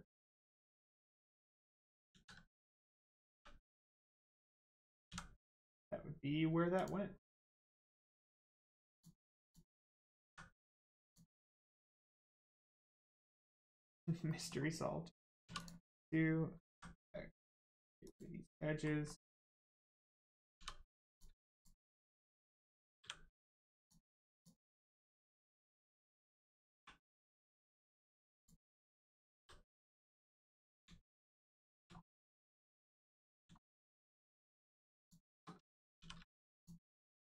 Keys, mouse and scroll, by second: 2.1 ctrl+z, 2.9 click, 3.3 3, 3.8 click, 5.0 x, 6.7 click, 7.2 middle click, 8.9 click, 9.4 shift+click, 10.2 x, 11.0 click, 11.4 middle click, 12.4 shift+middle click, 12.7 middle click, 12.8 middle click, 13.6-13.9 scroll up 1, 14.3 middle click, 15.4 2, 15.5 click, 16.7 x, 18.0 click, 18.5 middle click, 20.5 2, 21.1 click, 21.5 shift+click, 21.9 middle click, 23.8 click, 24.3 alt+click, 24.9 middle click, 26.3 scroll up 1, 26.7 1, 27.3 click, 27.7 shift+middle click, 28.3 shift+click, 29.3 m, 30.6 click, 31.0 shift+middle click, 32.5 scroll down 1, 32.9 middle click, 33.6 shift+middle click, 34.6 click, 35.0 shift+click, 36.0 shift+r, 36.6 click, 37.0 alt+click.